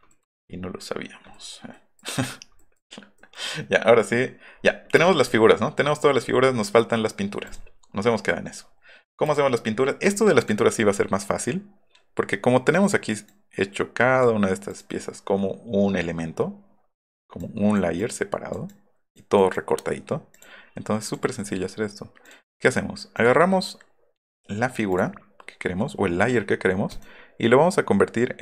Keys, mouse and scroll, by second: 0.0 middle click, 0.5 middle drag, 1.3 middle click, 1.7 middle click, 2.5 middle click, 3.1 middle click, 4.5 scroll up 1, 5.0-5.3 scroll up 2, 7.4 click, 9.2 click, 10.4 click, 12.8 click, 13.2-14.2 drag, 14.7 click, 17.4 click, 18.0 click, 18.7 click, 19.3 click, 20.3 click, 21.0 click, 22.2 click, 23.1 click, 24.9 click, 26.9 right click.